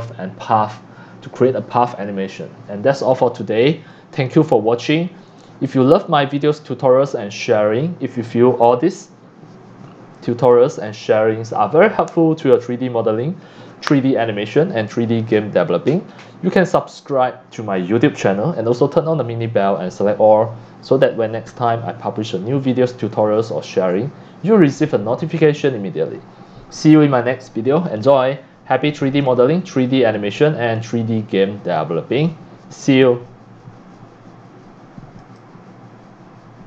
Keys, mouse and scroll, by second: 0.1-0.4 drag, 2.9-3.8 scroll up 20, 4.4-5.2 c, 5.4 click, 5.6 x, 6.2-11.1 drag, 29.3 drag, 30.8 click, 35.2 click.